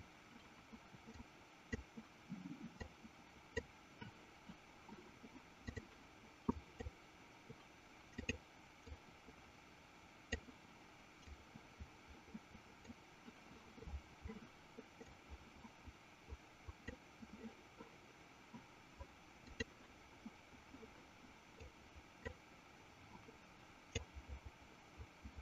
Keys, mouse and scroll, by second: 1.6 click, 3.3 click, 5.6 click, 6.8 click, 8.6 click, 9.5-10.9 drag, 11.8-13.3 drag, 15.4-17.4 drag, 19.3 click, 22.0 click, 24.4-25.4 drag.